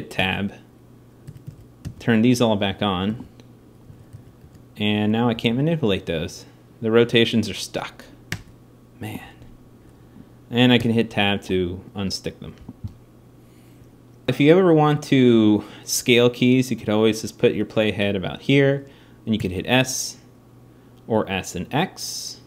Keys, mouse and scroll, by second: 1.0 a, 1.1 a, 5.1 g, 16.5-18.7 drag, 19.2 s.